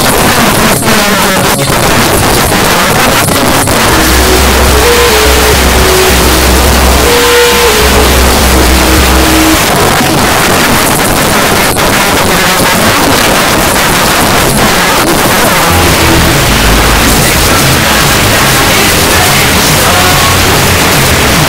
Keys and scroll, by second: 5.2 typing, 9.5 Page_Down, 15.2 typing, 18.0 typing.